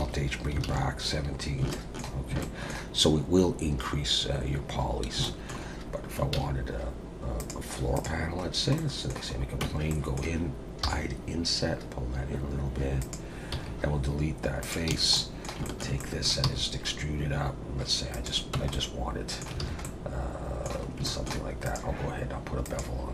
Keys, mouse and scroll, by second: 0.0 alt+h, 0.7 alt+a, 1.4-1.7 scroll down 3, 1.7 shift+middle click, 2.4 shift+middle click, 5.0 scroll up 2, 5.2 shift+middle click, 5.7-6.2 scroll down 1, 6.3 shift+a, 8.4-8.8 scroll down 2, 8.8 middle click, 9.4 scroll up 2, 9.6 Tab, 9.9 middle click, 10.8 i, 13.5 x, 14.9 a, 15.1 middle click, 15.6 shift+middle click, 16.0 middle click, 16.4 e, 18.5 Tab, 18.7 middle click, 19.6 alt+a, 19.8 middle click, 20.8 scroll up 2, 21.0 shift+middle click, 21.6 click, 22.6 click.